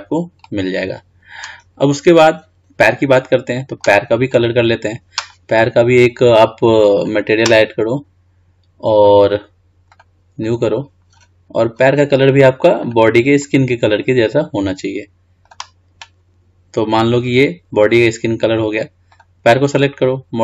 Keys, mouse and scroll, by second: 0.6-1.9 middle drag, 1.9 scroll down 3, 2.5-3.3 scroll up 2, 3.3-4.5 middle drag, 4.5-4.9 drag, 7.1 click, 10.1-13.1 drag, 15.6-16.0 drag, 19.3-19.8 drag.